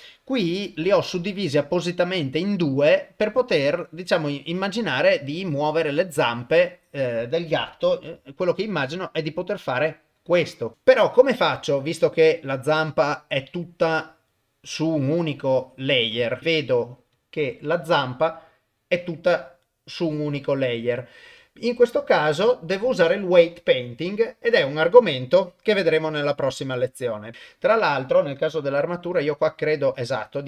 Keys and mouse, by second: 0.1 click, 0.8 click, 4.2 click, 6.4 click, 8.2 r, 12.9 click, 14.0 click, 16.4 ctrl+Tab, 16.4 click, 17.2 click, 27.3 ctrl+Tab, 27.6 click, 29.5 r.